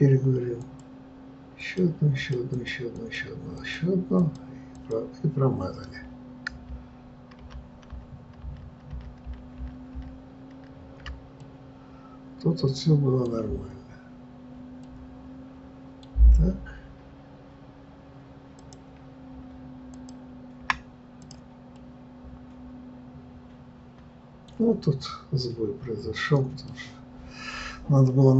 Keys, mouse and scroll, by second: 0.7-7.7 drag, 7.7 ctrl+z, 8.2-9.3 ctrl+z, 9.6 ctrl+z, 9.9 ctrl+z, 11.5-18.4 middle drag, 18.4 click, 21.7-28.3 middle drag.